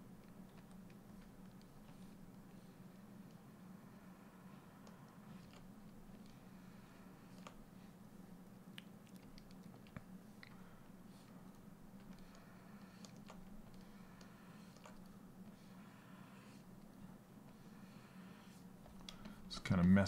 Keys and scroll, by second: 0.1 s.